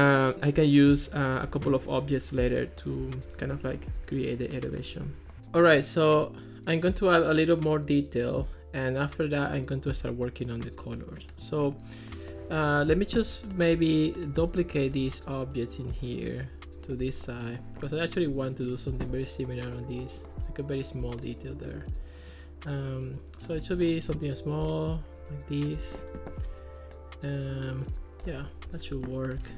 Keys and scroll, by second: 14.9 super+d.